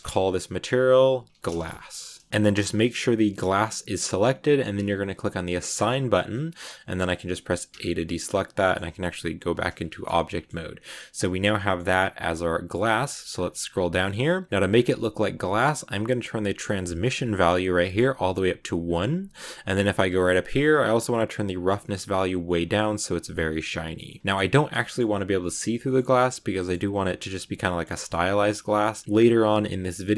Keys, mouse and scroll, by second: 2.3 scroll up 1, 3.3 click, 5.6 click, 6.2 middle click, 6.9-7.6 scroll up 1, 7.6 a, 7.9-9.3 middle drag, 9.3 Tab, 9.8-12.6 shift+middle drag, 12.6-14.5 scroll down 17, 15.7-16.3 scroll down 2, 17.8-19.2 drag, 19.2 middle click, 19.9 scroll up 3, 21.4 click, 22.2-24.0 drag, 24.0-27.8 shift+middle drag, 27.8-28.2 scroll up 2, 27.8 shift+middle click, 28.2 z, 28.7 middle click, 28.9 scroll up 1, 28.9 shift+middle click, 29.0-29.4 scroll down 1, 29.4-30.1 shift+middle drag.